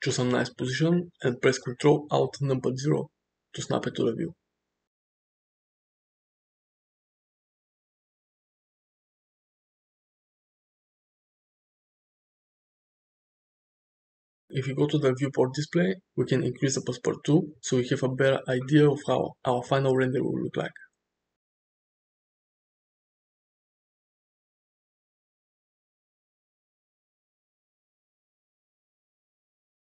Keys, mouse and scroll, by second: 0.1-3.0 middle drag, 3.2-4.3 shift+middle drag, 5.2 ctrl+alt+KP_0, 7.2 g, 10.1 shift+middle click, 10.8 g, 18.1 click, 24.5 space.